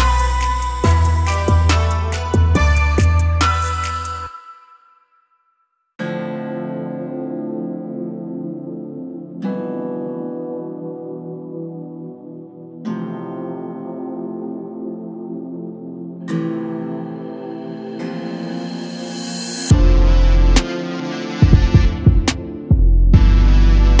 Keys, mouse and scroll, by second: 0.3 click, 1.4 click, 3.1 click, 4.0 click, 5.1-6.1 drag, 6.1-8.0 scroll up 15, 8.0-9.0 middle drag, 9.0 click, 13.3 click, 14.6-17.1 drag, 19.1-22.1 drag, 23.1 click, 23.5-24.0 middle drag.